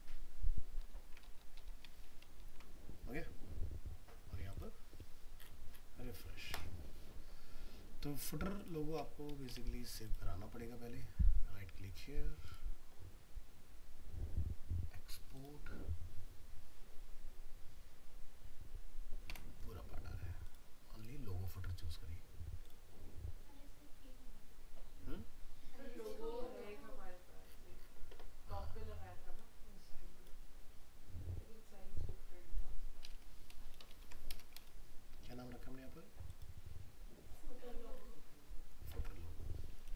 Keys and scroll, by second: 1.9 ctrl+v, 2.3 ctrl+s, 33.9 ctrl+Left, 39.0 alt+Tab.